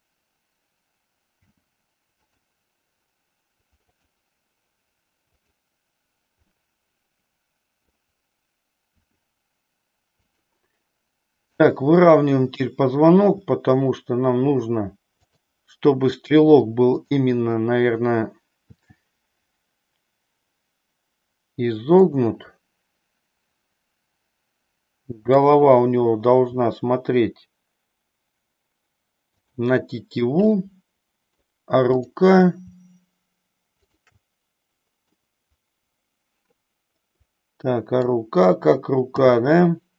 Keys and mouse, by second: 1.5 g, 3.9-5.0 drag, 5.3 click, 6.5-8.0 middle drag, 9.0 r, 10.4 click, 13.1 r, 15.3 click, 17.0-18.3 drag, 18.6 r, 25.3 click, 26.5 r, 29.4 click, 30.5-31.5 middle drag, 33.8-35.0 shift+drag, 35.1-38.1 middle drag, 39.1 g.